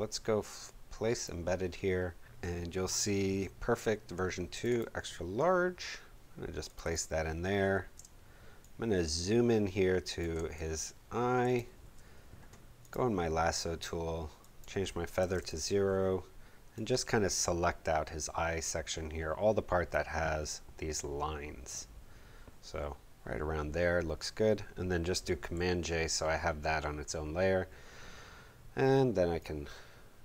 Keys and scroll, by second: 7.9 space, 15.2 0, 15.3 Home, 25.6 super+j.